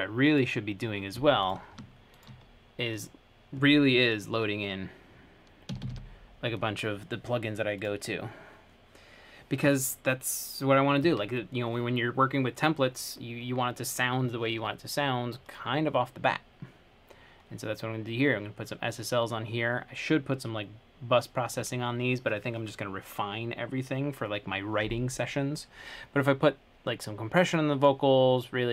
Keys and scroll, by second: 5.9 typing, 8.4 typing.